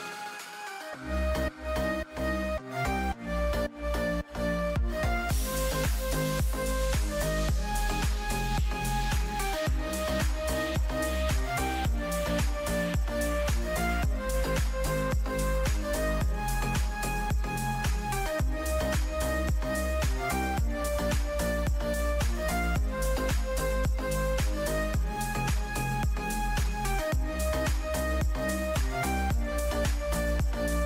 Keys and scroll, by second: 6.8 ctrl+z, 7.7 ctrl+z, 8.1 space, 9.9 ctrl+z, 17.1 space, 18.9 ctrl+z, 19.1 space, 20.1 ctrl+z, 28.4 ctrl+shift+[.